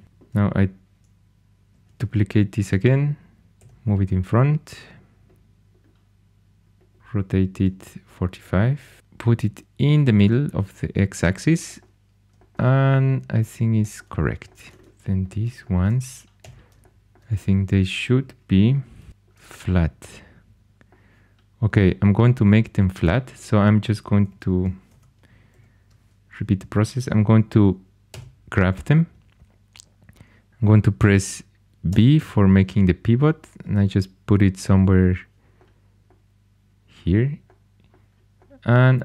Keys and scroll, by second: 1.8 shift+d, 3.5 g, 6.7-7.5 typing, 16.4 g, 18.9 v, 24.2 g, 24.9 ↺, 25.5 super+z, 28.0 g, 31.8 v.